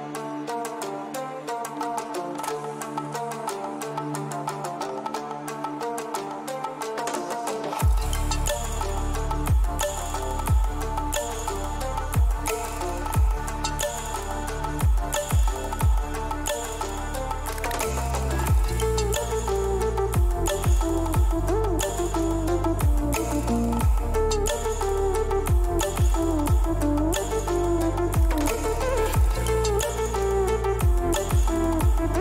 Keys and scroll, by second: 3.3 ctrl+-, 10.2 Delete, 13.6 ctrl+shift+a.